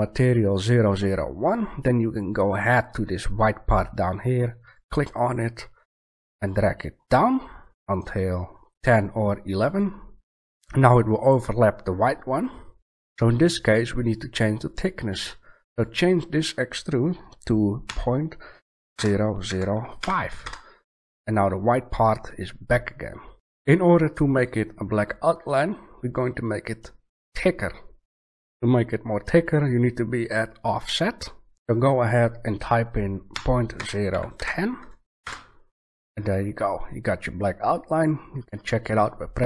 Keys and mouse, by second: 4.7-6.5 drag, 13.0-14.6 drag, 14.6 middle click, 15.8-17.6 drag, 23.3 F12, 23.3 Escape, 31.7-33.5 middle drag.